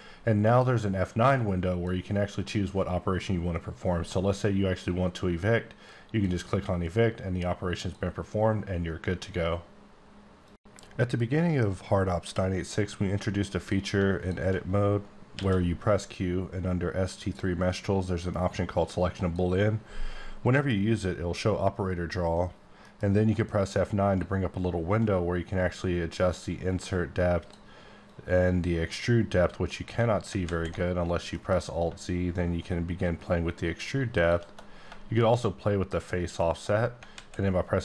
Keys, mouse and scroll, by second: 0.6 F9, 1.4 click, 2.4 click, 5.5 click, 7.8 click, 12.3 scroll up 2, 12.8 scroll down 1, 13.1 Tab, 13.6 click, 14.2 click, 15.3 q, 19.0 click, 22.8 F9, 23.6-27.7 drag, 28.1 shift+click, 30.3 alt+z, 31.3 F9, 32.3 click, 35.2 click.